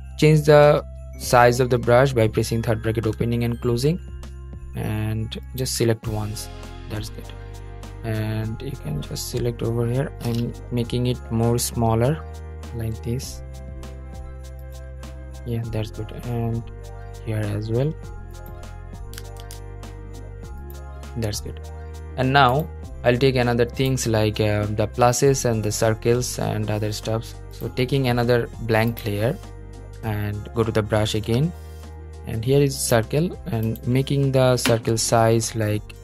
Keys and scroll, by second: 0.4 [, 10.6 [, 19.1 super+z, 31.3 b.